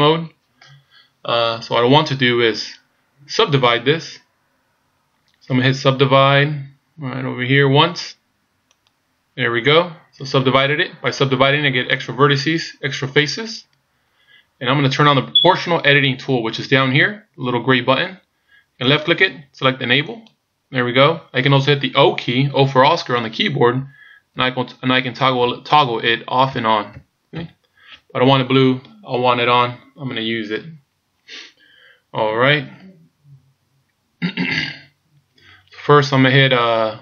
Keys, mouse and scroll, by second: 6.7-7.2 scroll down 1, 7.2 scroll down 1, 8.8 click, 18.8 click, 23.8-27.3 typing.